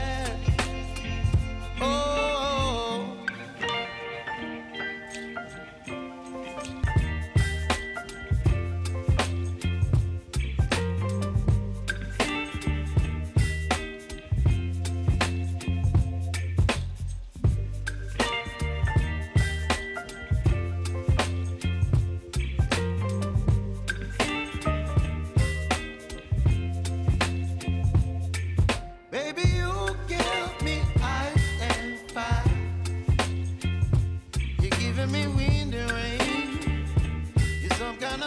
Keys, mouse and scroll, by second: 0.0 ctrl+c, 0.7 click, 1.1 ctrl+v, 3.5 j, 4.2-5.6 drag, 5.6 F9, 6.0 click, 6.8-7.2 typing, 8.6 click, 9.4 -, 10.2 Return, 11.3 typing, 12.7 click, 13.5 space, 16.6 j, 17.7 click, 18.5 Return, 19.6 click, 20.0 space, 22.3 click, 23.6 space, 24.4 click, 24.9 space, 26.5 click, 27.3 =, 28.2 scroll down 1, 29.0 click, 30.0 scroll up 1, 31.1 click, 33.9 p, 37.3 click.